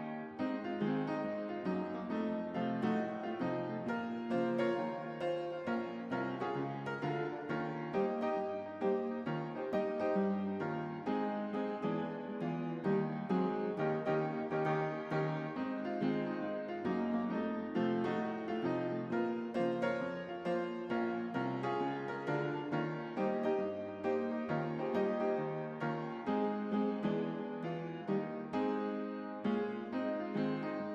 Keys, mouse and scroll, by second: 2.5-3.2 drag, 7.3-10.2 drag, 14.1-16.8 drag, 26.2 click, 28.0-30.0 drag.